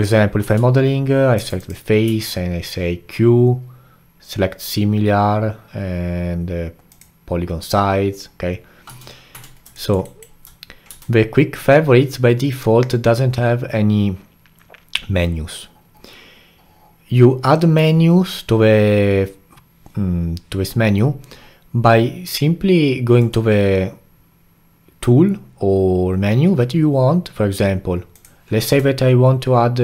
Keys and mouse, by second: 0.0 click, 0.5 Tab, 1.4 3, 1.6 click, 2.1 q, 8.9 a, 9.3 Tab, 9.8 alt+middle drag, 10.1-10.9 alt+right drag, 10.9 q, 23.2-26.3 drag, 28.6 q.